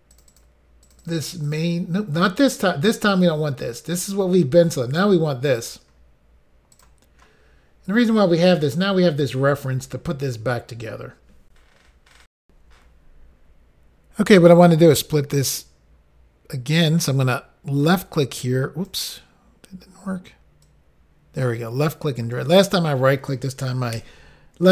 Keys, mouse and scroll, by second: 0.2 double click, 0.3 double click, 0.3 double click, 0.5 double click, 0.9 double click, 1.0 double click, 1.1 double click, 1.2 double click, 1.5 double click, 1.6 double click, 5.6 click, 5.7 click, 6.8 click, 6.9 click, 7.9-8.3 scroll down 2, 12.4 Insert, 17.8 click, 20.6 click.